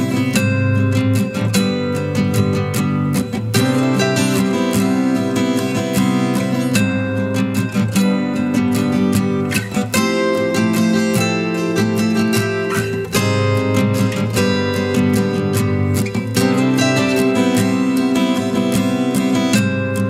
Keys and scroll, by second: 5.7 ctrl+t, 8.9 a.